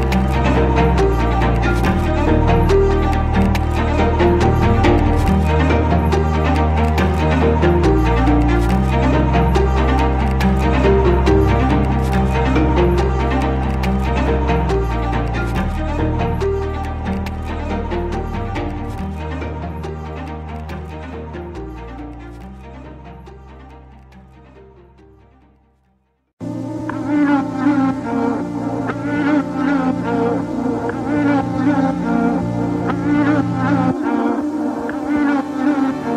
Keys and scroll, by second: 3.0 Escape, 6.5 ctrl+x, 33.3 Escape.